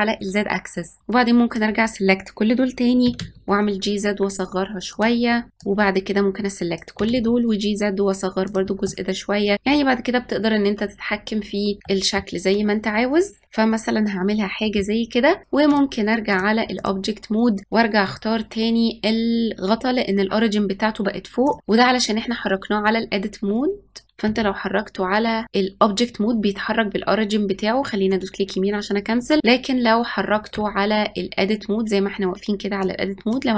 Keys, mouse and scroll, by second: 1.0 click, 3.0 g, 5.5 click, 6.9 g, 8.7-11.5 middle drag, 11.8-13.4 middle drag, 13.4 click, 15.4 click, 16.7 click, 17.6-19.8 middle drag, 21.4 click, 24.2 g, 30.4 Tab, 32.7 click.